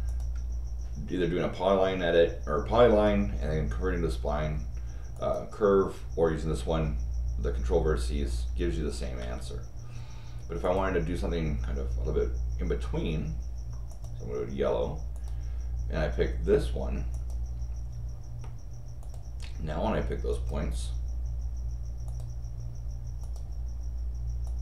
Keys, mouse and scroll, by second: 0.0 click, 0.7 middle click, 0.7 scroll down 2, 5.1 click, 9.2 Escape, 10.6 click, 13.9 click, 15.1 click, 17.1 click, 19.0 click, 20.3 click, 22.0 click, 23.2 click, 24.4 click.